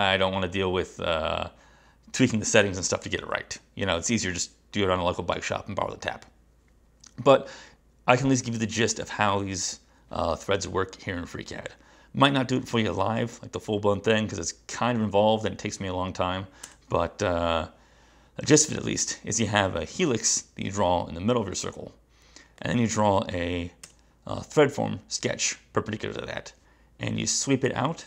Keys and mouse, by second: 22.6 click, 23.9 space, 27.8 click.